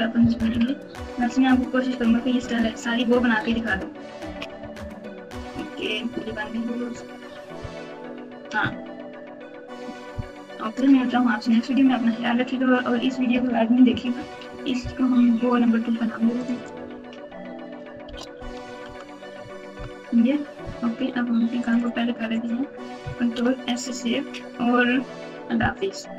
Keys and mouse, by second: 0.0-2.1 typing, 2.3 KP_Subtract, 2.5 KP_Subtract, 3.4 KP_Add, 4.2-6.4 typing, 7.5 KP_6, 16.5-19.7 drag, 21.6 right click, 22.3 click, 23.3 ctrl+s.